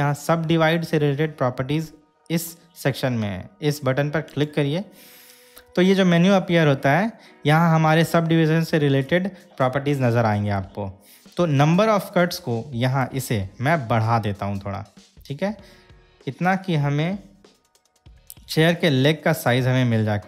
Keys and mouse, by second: 17.9-19.7 drag.